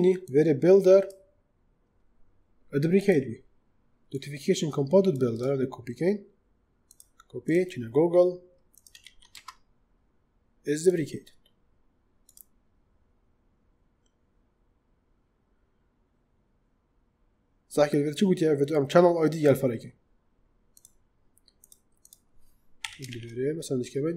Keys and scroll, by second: 8.9 ctrl+v, 9.2 space, 22.7 ,, 23.0 shift+'.